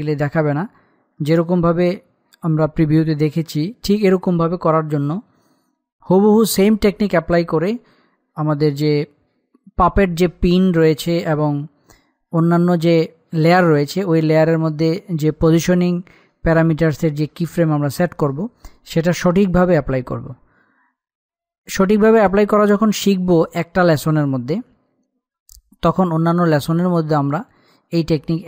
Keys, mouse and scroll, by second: 1.3-4.3 middle drag.